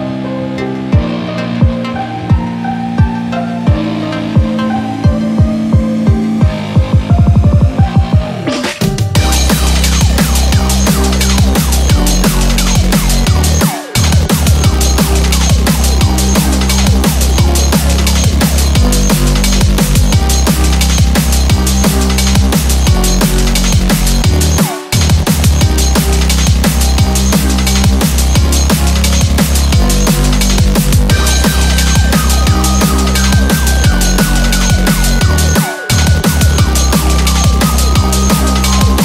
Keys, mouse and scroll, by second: 3.4 middle click, 5.1 middle click, 6.7 scroll up 3, 7.5 middle click, 8.4 middle click, 9.1 middle click, 9.6 middle click, 9.9-10.7 scroll down 8, 10.2 middle click, 10.7 middle click, 10.9 middle click, 10.9-11.3 scroll up 3, 11.3 scroll down 1, 11.4 scroll down 1, 11.6-12.0 scroll up 5, 12.0 middle click, 12.2 middle click, 16.4 scroll down 5, 17.1-17.4 scroll up 5, 18.1 click, 18.7 scroll down 2, 18.9 middle click, 19.4 scroll up 2, 19.5 middle click, 19.8 scroll down 1, 20.3 middle click, 22.0 shift+a, 25.5 4, 27.5 scroll down 4, 27.8 s, 28.0 KP_Decimal, 30.5 scroll up 5, 31.6-33.0 scroll up 2, 34.6 click, 35.0 middle click, 36.2 KP_1, 37.0 g.